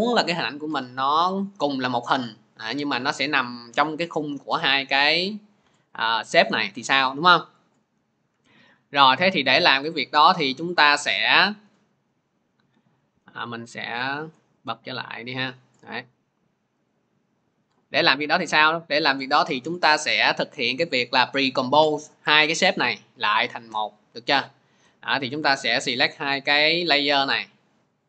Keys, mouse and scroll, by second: 3.2 click, 5.8 click, 8.2 Delete, 10.8 click, 11.9 click, 17.4 click, 19.5 click, 23.7 click.